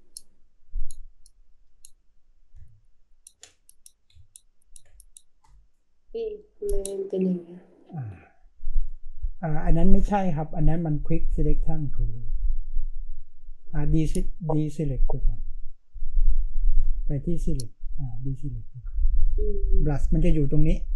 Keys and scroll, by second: 2.5 space.